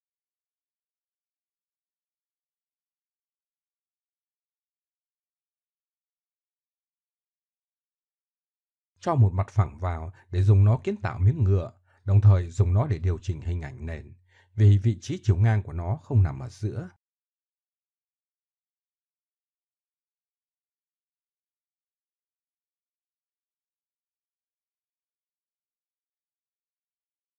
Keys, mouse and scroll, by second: 1.8-3.0 drag, 4.7 click, 10.3 shift+a, 12.6 z, 14.1 s, 17.0 middle click, 17.6 s, 20.4 click, 21.4 click, 21.8 BackSpace, 22.8 click, 24.5-26.5 drag.